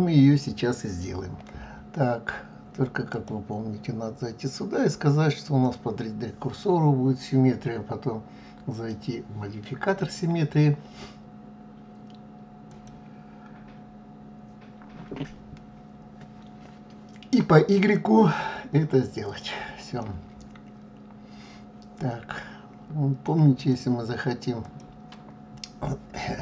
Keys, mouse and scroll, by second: 3.1-6.1 drag, 8.7 click, 9.9-13.0 drag, 17.8 click, 19.3 click, 20.0-23.0 middle drag, 23.6 click, 24.6 click.